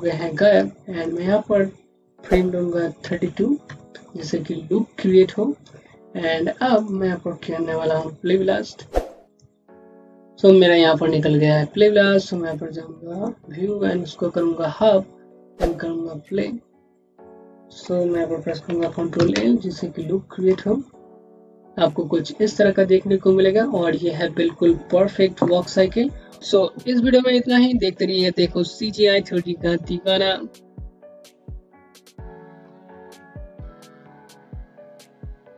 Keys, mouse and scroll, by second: 0.9 1, 0.9 click, 2.9 KP_3, 3.1 KP_2, 3.5 KP_Enter, 6.6 right click, 7.7 click, 12.0 click, 18.7 click, 19.0 l.